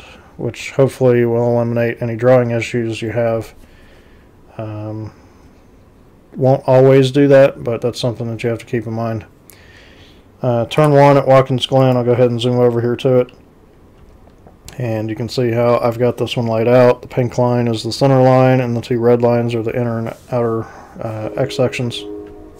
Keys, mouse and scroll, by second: 10.8 click, 11.8 c, 14.0 z, 15.1 z.